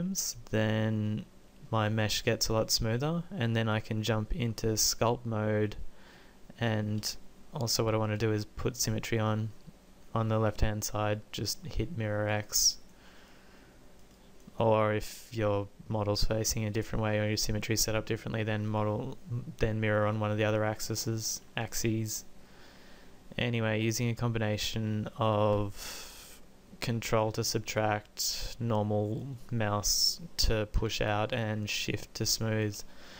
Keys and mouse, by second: 0.4-1.8 middle drag, 2.4 middle click, 6.2-11.6 drag, 7.5 ctrl+z, 12.4-16.1 drag, 16.1-17.6 middle drag, 20.4-30.5 middle drag, 31.2-32.8 middle drag.